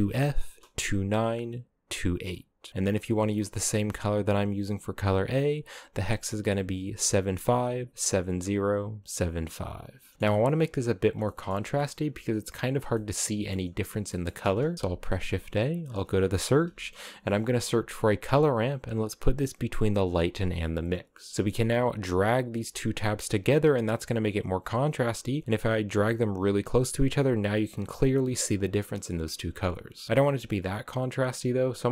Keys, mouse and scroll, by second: 4.1 click, 9.6 scroll down 4, 10.1 shift+middle click, 10.8-12.2 scroll up 4, 10.9 shift+middle click, 12.2-12.6 scroll down 1, 12.6-14.0 shift+middle drag, 14.0-14.7 scroll down 3, 14.7 shift+a, 19.9 click, 21.3 scroll up 4, 22.1 click, 22.8-23.6 scroll down 2, 23.6-27.1 drag, 27.1-28.5 scroll up 1, 28.5-30.1 scroll up 2, 30.1-30.9 scroll up 1, 30.9-31.9 drag.